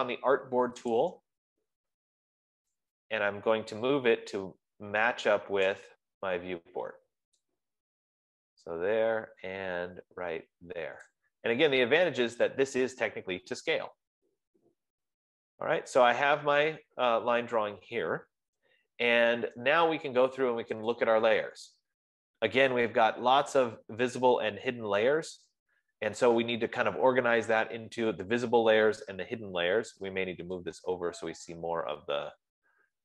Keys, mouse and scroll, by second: 1.5 click, 6.1 click, 11.5-16.7 drag, 19.6 F15, 21.3-25.4 drag, 26.1-27.1 scroll down 5, 32.3-33.0 drag.